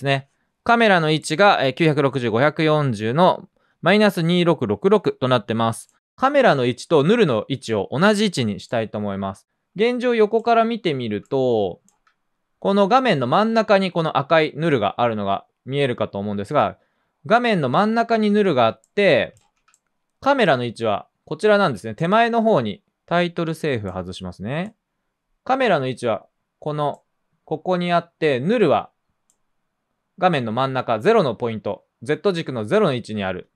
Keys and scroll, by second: 0.0 p, 11.0 c, 11.9 c, 14.1-14.9 typing, 18.2 typing, 19.5 typing.